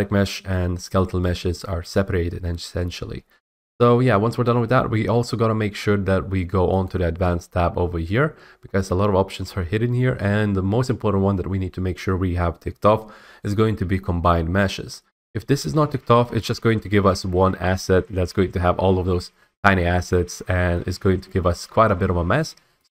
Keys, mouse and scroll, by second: 6.8 click, 7.3 click, 22.8 click.